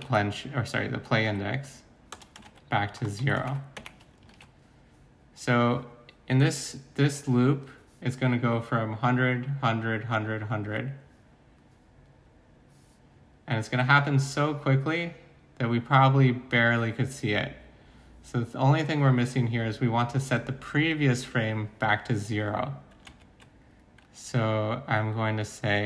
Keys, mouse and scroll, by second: 0.0-3.8 typing, 4.3 ctrl+s, 4.8-5.5 typing, 23.1 alt+Tab.